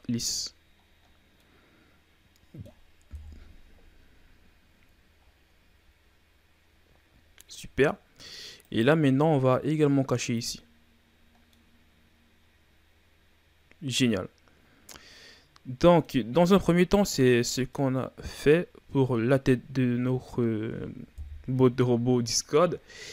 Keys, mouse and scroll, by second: 0.2-1.4 scroll down 7, 1.4-3.1 middle drag, 3.1 KP_1, 4.1-5.2 scroll down 3, 5.2-5.8 shift+scroll up 1, 5.8-7.1 scroll up 4, 7.1-7.8 shift+scroll up 4, 7.8-8.6 scroll up 2, 8.6 right click, 10.3 click, 11.3 scroll down 1, 11.5-14.5 middle drag, 16.7-17.7 scroll down 4, 17.7-20.8 middle drag, 21.1 KP_1.